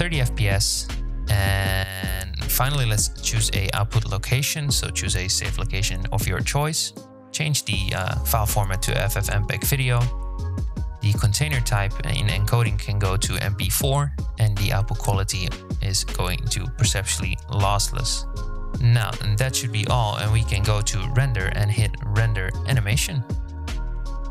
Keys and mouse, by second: 0.9 z, 1.0 space, 6.1-7.3 drag, 8.5 click, 9.9-11.2 drag, 13.6-15.3 drag, 20.4-24.3 drag.